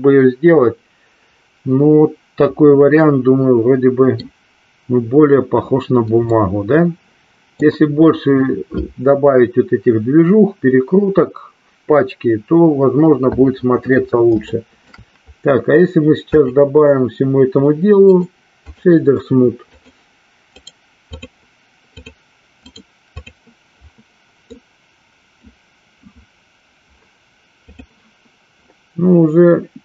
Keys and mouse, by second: 3.1-4.3 middle drag, 6.5-7.8 middle drag, 14.8 shift+middle click, 16.8 click, 18.3 right click, 20.0 click, 20.8 right click, 22.2 click, 22.7 right click, 24.8 middle click, 28.0 click.